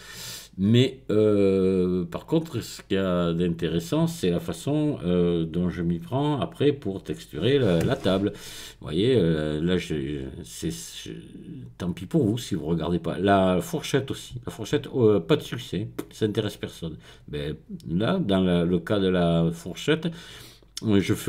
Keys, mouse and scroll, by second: 2.9 click, 4.8 click, 6.6-7.5 scroll down 1.